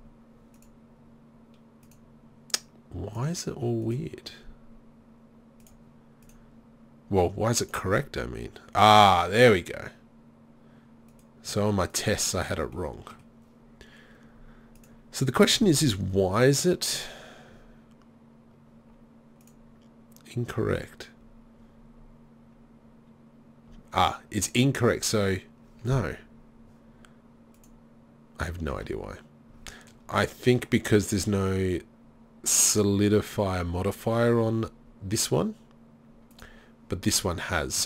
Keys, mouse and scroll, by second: 0.6 click, 13.0 click, 15.0-18.8 drag, 19.5-21.2 drag, 27.6-29.5 drag, 30.7-34.8 drag, 36.3-37.8 drag.